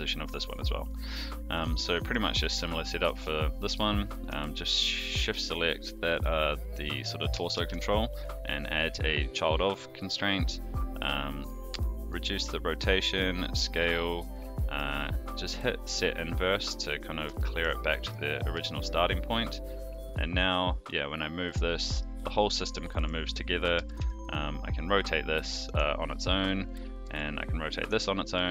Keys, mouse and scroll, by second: 0.8 middle click, 1.5 click, 1.9 shift+middle drag, 3.0 click, 3.6 shift+click, 4.5 ctrl+shift+c, 7.5 ctrl+shift+c, 11.6-12.1 drag, 12.7-13.2 drag, 14.7 click, 17.3 shift+middle drag, 18.0 click, 18.5 g, 22.7-23.0 middle drag, 23.5 click, 23.7 r, 26.6 click, 27.0 r, 28.2 middle click.